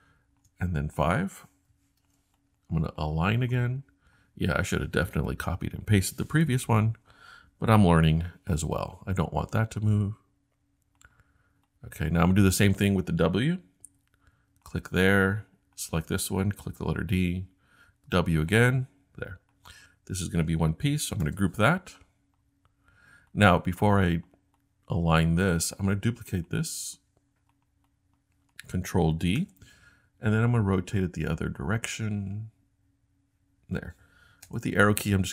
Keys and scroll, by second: 1.7 5, 2.0 Return, 8.1 l, 13.8 w, 16.8 d, 17.9 w, 21.2 super+g, 29.4 super+d, 34.5 Left, 34.6 Left, 35.1-35.3 typing.